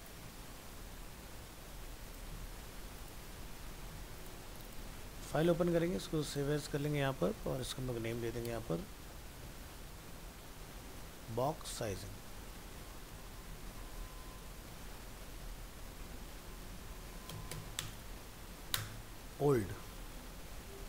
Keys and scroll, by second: 0.7 ctrl+w, 1.2 ctrl+s, 2.5 ctrl+w, 3.4 ctrl+s, 5.0 alt+f, 5.1 alt+释, 6.9 ctrl+Tab, 8.3 ctrl+shift+Left.